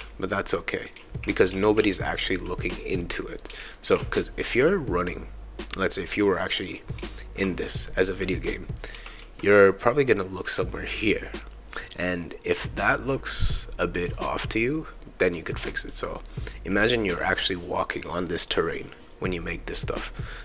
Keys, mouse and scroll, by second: 0.0-1.8 typing, 0.4-10.6 shift+right drag, 7.0 s, 7.4 q, 8.7-9.7 typing, 11.5-12.9 right drag, 15.2-17.0 drag, 18.4 click.